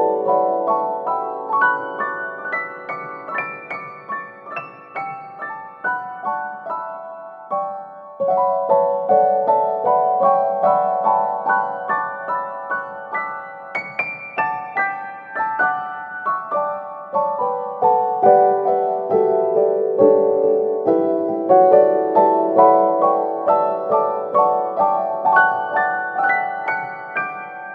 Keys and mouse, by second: 1.2 e, 1.7 s, 3.4 s, 4.9 middle click, 6.4-7.0 drag, 7.0 KP_3, 7.7 g, 8.3 s, 9.5 KP_1, 10.7 click, 11.6 right click, 12.4 shift+right click, 12.9 alt+z, 13.5 g, 15.8 g, 18.3 alt+z, 19.4 middle click, 19.9 middle click, 20.5 middle click, 21.2 Tab, 21.6 middle click, 22.1 KP_3, 22.8 middle click, 23.3 Tab, 24.0 middle click, 24.8 ctrl+r, 26.1-27.3 middle drag.